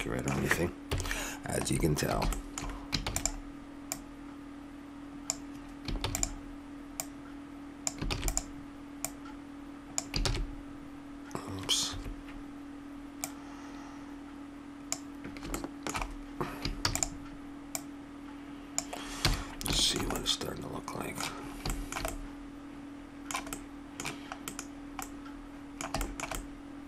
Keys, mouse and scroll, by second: 0.9 KP_7, 1.6 middle click, 3.0 shift+d, 3.9-5.5 drag, 6.0 shift+d, 6.9-8.6 drag, 8.1 shift+d, 10.2 shift+d, 13.2-15.0 drag, 15.1 middle click, 15.7 middle click, 16.9 shift+d, 17.7-19.4 drag, 19.2 a, 19.4 middle click, 25.7-26.8 middle drag.